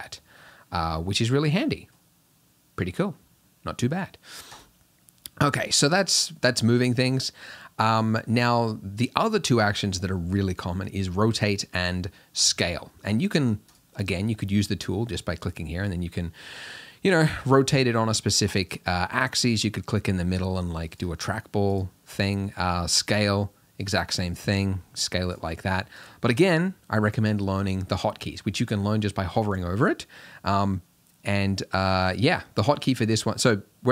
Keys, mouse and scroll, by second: 13.8-16.7 drag, 18.1 click, 19.3 click, 21.8-23.8 drag, 24.5 click, 26.0-33.9 drag.